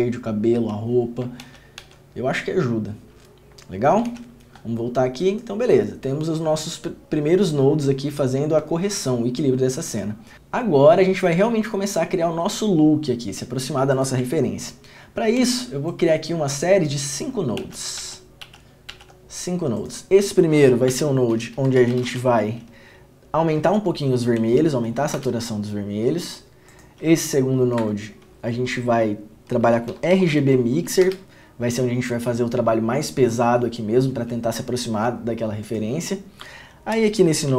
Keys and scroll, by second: 1.6 ctrl+d, 1.9 ctrl+d, 4.3 ctrl+f, 15.5 alt+s, 17.7 alt+s, 18.1 alt+s, 18.6 alt+s, 19.0 alt+s, 21.0 Tab, 22.1 r, 25.3 Return, 27.9 Tab, 30.0 g, 30.3 b, 31.2 Return.